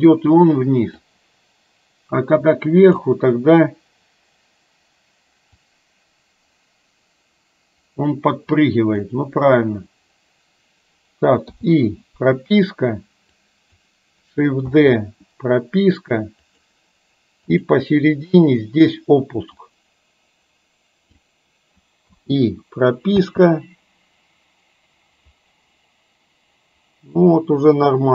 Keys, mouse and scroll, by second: 1.2-3.2 drag, 5.8-9.2 drag, 11.5 i, 13.3-13.9 drag, 14.8 shift+d, 17.5 click, 19.7-21.3 drag, 22.2 i, 23.3 space.